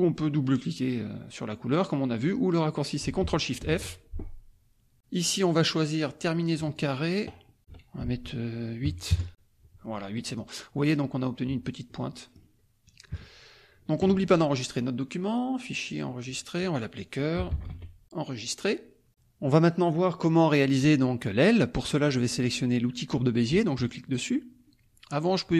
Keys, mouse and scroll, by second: 3.6 ctrl+shift+f, 6.6 click, 8.0 ctrl+a, 9.0 KP_Enter, 10.2 click, 11.8 click, 12.1 middle click, 13.1 KP_Subtract, 14.6 click, 16.3 click, 17.5 c, 18.5 click, 23.7 click.